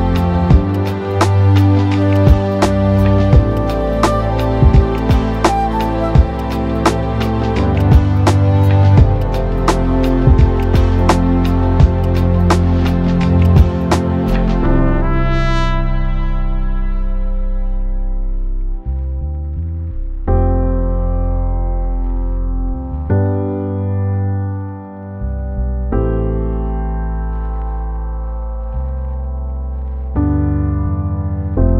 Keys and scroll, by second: 7.9 Escape, 10.0 ctrl+z, 26.7 Return.